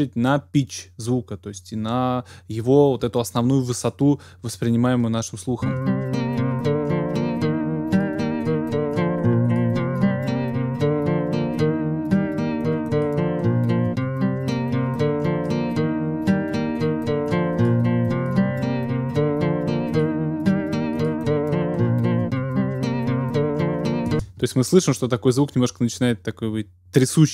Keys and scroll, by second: 5.6 space, 24.1 typing.